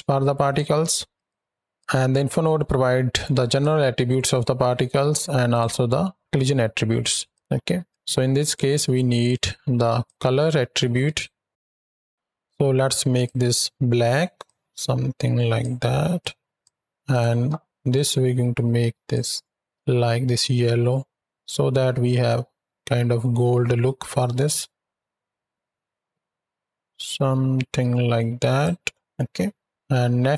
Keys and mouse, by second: 1.0 click, 3.3 click, 5.3 click, 7.2 click, 7.8 drag, 8.8 click, 9.9-11.0 drag, 11.5 ctrl+space, 12.1 ctrl+z, 12.9 click, 16.9 click, 17.8 click, 29.0 ctrl+middle click, 30.1 middle click.